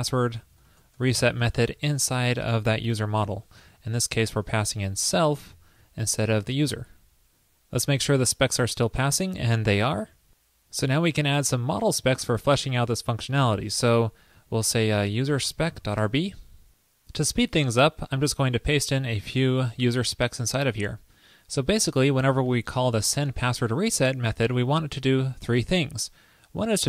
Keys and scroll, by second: 1.8 super+v, 3.2 super+s, 4.2 alt+Left, 5.6 alt+shift+Left, 6.9 super+s, 19.0 super+v.